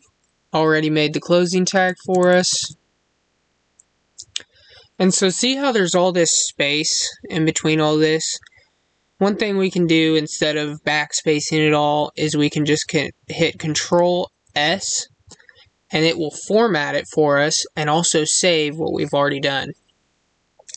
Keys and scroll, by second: 14.4 ctrl+s.